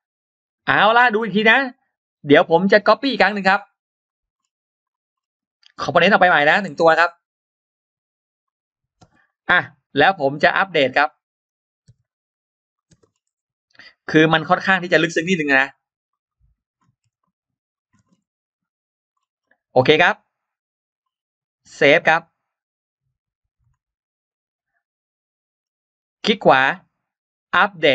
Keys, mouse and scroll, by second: 2.7 click, 3.7 click, 4.2 scroll down 2, 4.7 click, 5.0 scroll up 2, 8.3 click, 8.3 m, 9.1 click, 9.1 space, 10.0 click, 10.1 click, 10.4 scroll up 1, 11.0 click, 11.8 click, 12.6 click, 12.6 m, 12.6 space, 12.9-13.2 scroll down 1, 12.9 space, 13.8 Escape, 13.8 middle click, 14.3 click, 14.5 click, 15.0 click, 15.4 click, 16.0 click, 17.1 click, 17.7 m, 17.9-18.2 scroll down 1, 17.9 space, 18.6-18.9 scroll up 1, 19.6 middle click, 20.0 scroll up 1, 21.9 click, 25.4 middle click, 25.8 right click, 27.6 click.